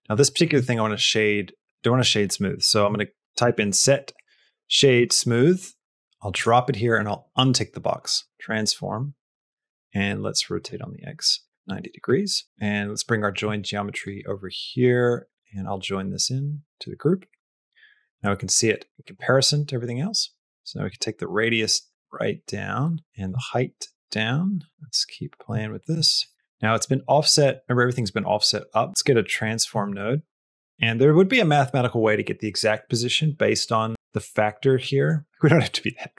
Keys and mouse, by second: 0.1 middle click, 0.8 shift+a, 7.2 click, 8.1 middle click, 8.3 shift+a, 10.6-12.0 drag, 12.2 middle click, 12.7 click, 14.0 click, 15.3 click, 15.4-16.7 drag, 17.8 middle click, 18.1 middle click, 19.8 middle click, 20.8-23.0 shift+drag, 23.1-24.6 shift+drag, 24.7 shift+click, 25.9 shift+middle click, 26.2 middle click, 27.1 middle click, 29.2 click, 29.6 shift+a, 30.8 middle click, 34.7 middle click, 35.6 middle click, 36.0 middle click.